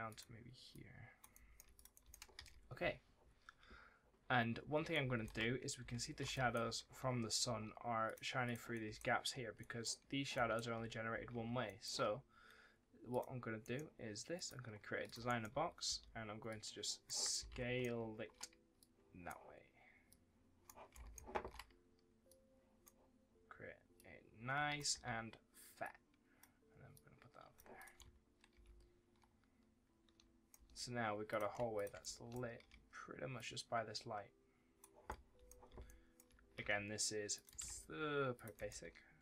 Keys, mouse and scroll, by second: 1.2 right click, 1.2 s, 1.6 click, 1.8 right click, 1.9 w, 2.2 ctrl+s, 4.8 right click, 5.1-7.3 typing, 6.2 right click, 7.9 click, 8.6 right click, 8.7 d, 9.4 a, 9.5 right click, 10.2 s, 11.5 right click, 11.7 s, 13.0 click, 13.5 right click, 14.2 click, 15.1 right click, 15.4 2, 16.3 click, 17.2 right click, 17.2 s, 18.6 click, 20.8 right click, 22.1 click, 24.8 1, 25.7 click, 27.8 w, 28.4 shift+d, 30.4 w, 31.2 click, 31.6 ctrl+click, 31.9 right click, 33.2 click, 34.9 right click, 35.0 d, 35.7 right click, 36.1 s, 37.2 click, 37.5 ctrl+d, 38.2 click, 38.4 right click, 38.7 w.